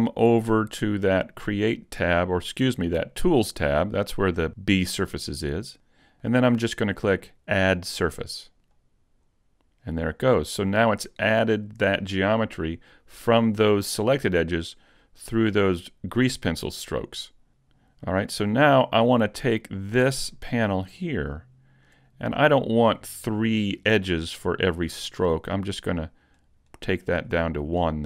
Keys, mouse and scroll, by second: 2.7 click, 8.8 click, 20.4 click, 25.6 click.